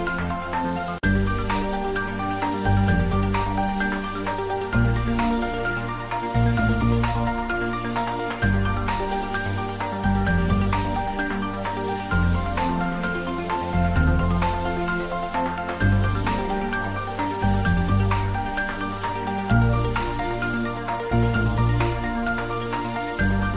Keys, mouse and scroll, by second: 0.3 click, 0.5 Tab, 1.2 middle click, 1.9 click, 2.5 shift+middle click, 3.0 Tab, 3.3 middle click, 3.8 click, 4.1 Tab, 4.2 click, 4.8 shift+z, 5.0 click, 5.5 2, 6.3 Tab, 6.8 3, 7.0 click, 8.2 1, 9.3 click, 12.3-14.1 typing, 14.8 middle click, 15.4 click, 17.2 e, 18.8 click, 19.1 ctrl+middle click, 19.7-21.2 shift+middle drag, 21.2 s.